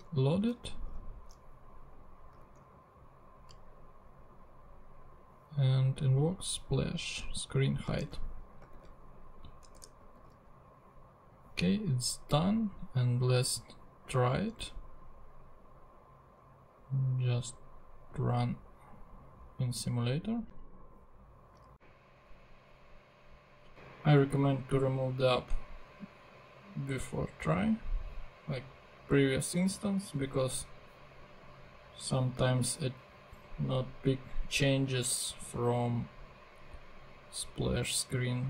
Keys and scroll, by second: 0.0 super+z, 2.4 super+Tab, 7.8 super+c, 8.0 super+Tab, 8.8 super+v, 9.8 super+BackSpace, 10.2 super+s, 22.0 super+Tab.